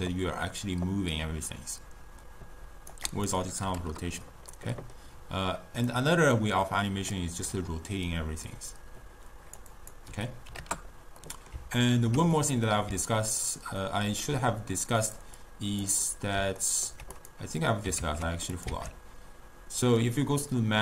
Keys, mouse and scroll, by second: 3.2-4.6 drag, 4.6-5.9 middle drag, 5.9-9.3 drag, 9.8-11.3 drag, 11.3-15.1 middle drag, 15.1 click, 15.4-16.1 drag, 16.1-17.2 middle drag, 17.2 click, 18.1 ctrl+a, 18.8 shift+a.